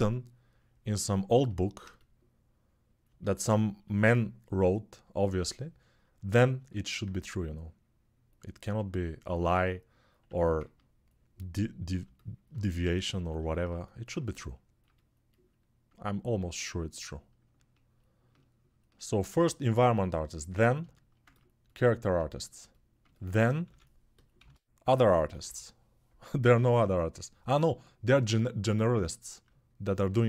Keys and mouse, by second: 10.0 1, 20.9-30.2 ctrl+alt+drag, 23.4-26.2 typing.